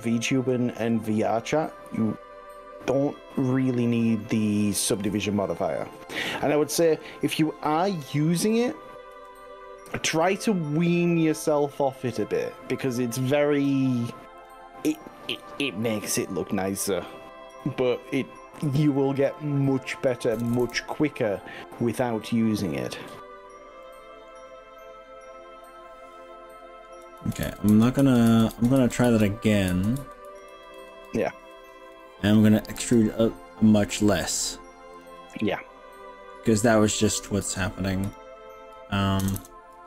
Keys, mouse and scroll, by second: 0.0 ctrl+z, 0.3 ctrl+z, 1.6-3.6 middle drag, 3.8 middle click, 4.9 KP_3, 7.0 click, 9.1 g, 12.2 click, 12.5 middle click, 13.6 middle click, 14.4 click, 14.8 middle click, 16.1-17.2 middle drag, 17.6 click, 18.9 click, 19.3 click, 20.3 ctrl+KP_Add, 20.6 ctrl+KP_Add, 21.6 middle click, 23.8 middle click, 26.2 middle click, 27.2 ctrl+z, 27.6 ctrl+z, 27.8 ctrl+z, 28.0 ctrl+z, 28.4 ctrl+z, 28.6 ctrl+z, 28.8 ctrl+z, 29.2 ctrl+z, 29.8 ctrl+z, 30.0 ctrl+z, 30.4 ctrl+z, 30.6 ctrl+z, 30.8 ctrl+z, 31.2 ctrl+z, 32.8 e, 35.0 click, 35.2-36.4 middle drag, 38.1 click, 39.2 ctrl+KP_Add, 39.4 ctrl+KP_Add.